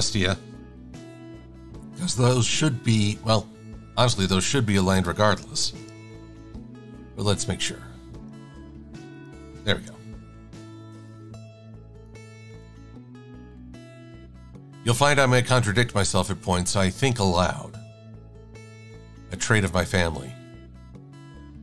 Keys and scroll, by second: 13.9 super+s.